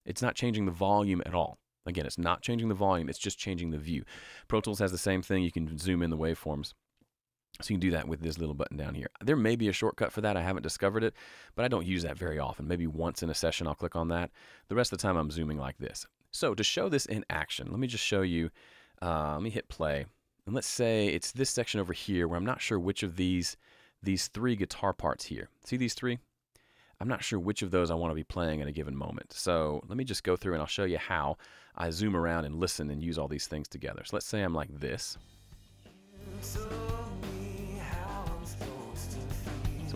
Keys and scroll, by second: 35.0 super+space, 35.6 space.